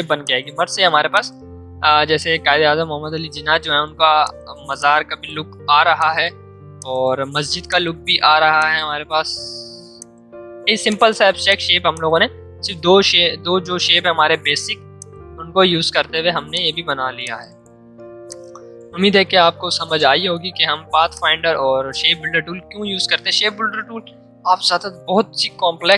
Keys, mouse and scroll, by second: 11.2 click, 12.8 ctrl+z, 14.9-19.8 shift+drag, 19.8 ctrl+2, 21.1 click, 22.4 ctrl+2, 23.8 m, 25.8 shift+click.